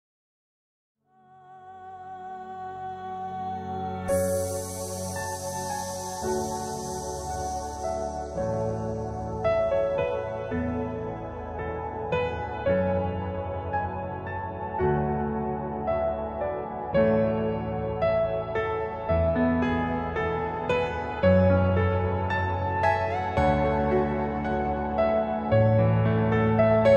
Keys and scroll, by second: 0.2 ctrl+r, 0.6 Escape, 15.0 F2.